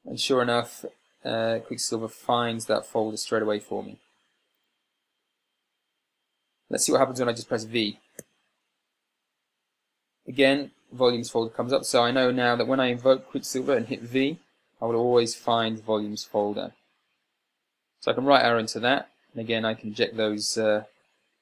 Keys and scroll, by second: 8.7 v, 18.8 Right.